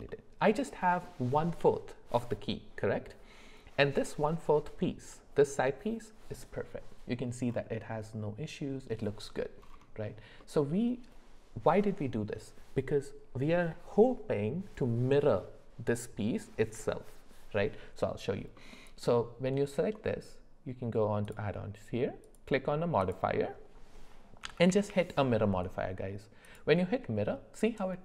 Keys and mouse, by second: 0.1 middle click, 10.4 middle click, 18.6 middle click, 22.2-26.6 drag.